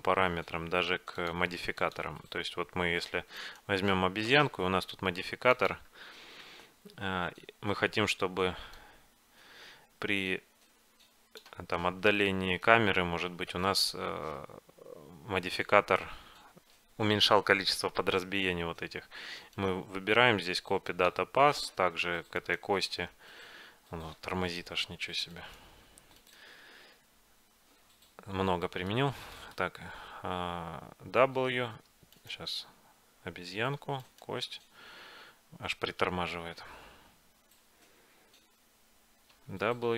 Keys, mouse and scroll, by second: 1.3-4.8 drag, 3.5-5.3 right drag, 5.6-11.3 drag, 12.2-15.5 middle drag, 19.6-21.5 right drag, 27.2 right click, 27.9 right click, 28.8-31.3 middle drag, 31.3 w, 33.2 right click, 39.5 w.